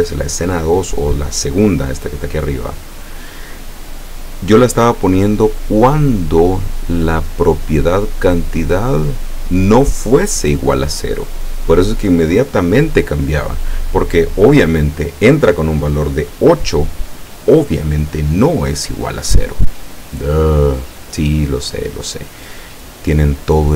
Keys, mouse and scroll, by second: 2.2 click, 3.3 click, 19.7 middle click, 20.9 scroll up 1, 21.6 click, 22.1 click.